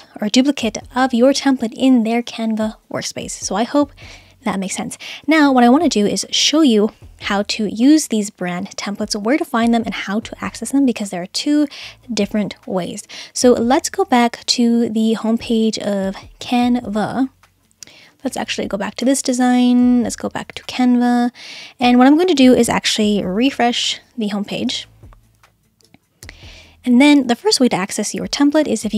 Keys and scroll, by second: 24.7 super+r.